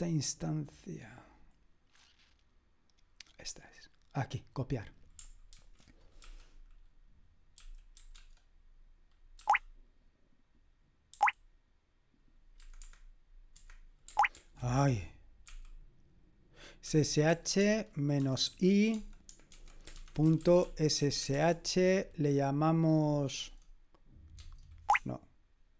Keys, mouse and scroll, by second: 0.6-1.5 scroll down 1, 1.5-2.3 scroll down 1, 2.5-4.1 scroll down 1, 4.1 click, 5.6 ctrl+r, 6.3 s, 8.0 typing, 12.6 Escape, 12.8 Escape, 13.5 Escape, 14.4 ctrl+c, 15.5 typing, 16.8-21.9 typing, 23.3 Tab, 24.4 Tab, 24.9 BackSpace, 25.6-25.7 BackSpace.